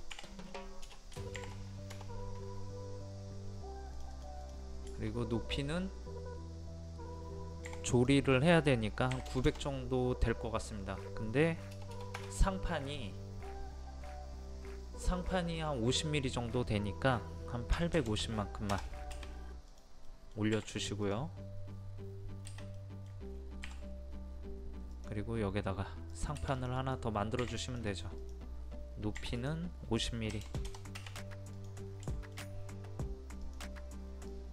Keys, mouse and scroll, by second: 0.9 BackSpace, 1.9 Return, 4.0 click, 7.7 p, 7.9 click, 9.1 KP_9, 11.7 BackSpace, 17.7 KP_8, 19.5 space, 19.7 click, 20.1 middle click, 21.1 click, 22.8 middle click, 23.4 scroll up 1, 24.9 click, 30.3 KP_5, 31.6 click, 32.1 shift+middle click, 33.4-34.5 drag.